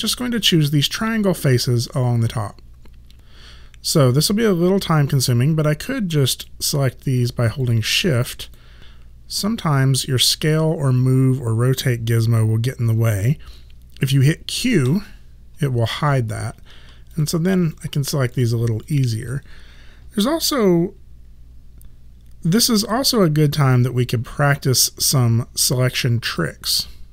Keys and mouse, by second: 3.2 click, 6.3 click, 7.7 shift+click, 14.9 q, 17.2 shift+click.